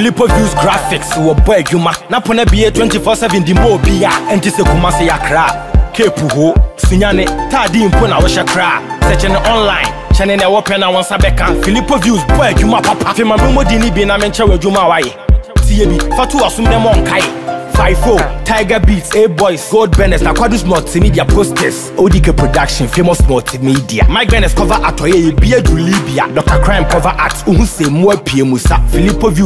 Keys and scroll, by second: 15.7 ctrl+-.